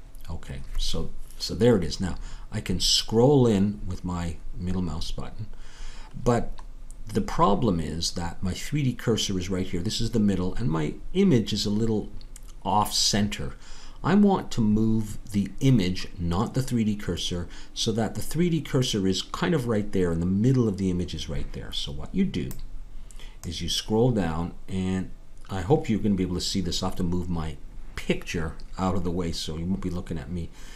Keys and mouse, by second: 0.0-1.7 drag, 2.6 middle click, 4.3 middle click.